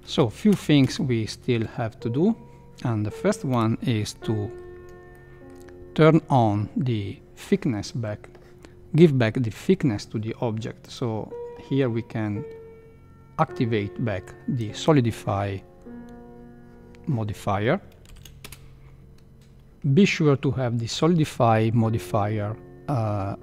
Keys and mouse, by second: 0.0 shift+Left, 0.0 space, 0.0 space, 0.5 space, 0.8 space, 3.5 KP_Decimal, 4.2-4.6 middle drag, 5.3 middle click, 10.9-14.8 drag, 18.1 shift+Left, 18.4 space.